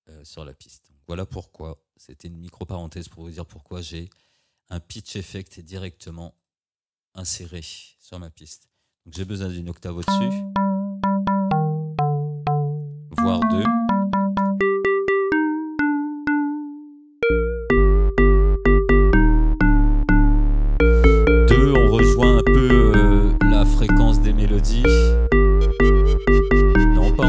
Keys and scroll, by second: 2.0 Delete, 8.6 1, 9.2 Return, 14.1 2, 14.4 Return.